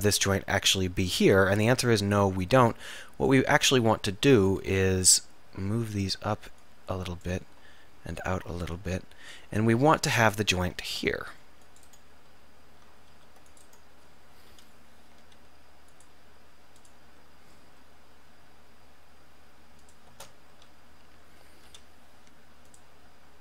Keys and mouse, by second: 3.6 ctrl+z, 5.1 click, 5.3 middle click, 7.8 middle click, 10.1 middle click, 10.9 ctrl+r, 13.2 ctrl+r, 14.6 k, 21.8 k.